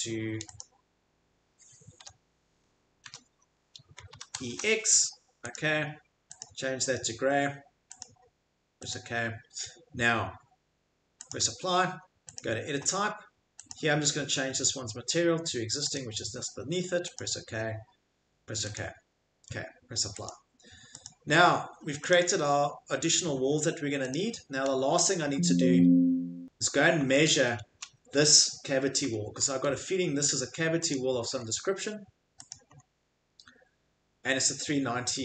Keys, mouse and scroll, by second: 2.0 BackSpace, 3.0 BackSpace, 4.1 shift+e, 4.4 x, 6.4 click, 8.0 click, 8.9 click, 11.3 click, 12.3 click, 13.7 click, 21.0 click, 22.0 click, 24.1 click, 24.7 Escape, 25.1 scroll, 25.3 Escape, 27.0 Escape, 27.2 Escape, 28.0 Escape, 29.0 Escape, 29.4 click.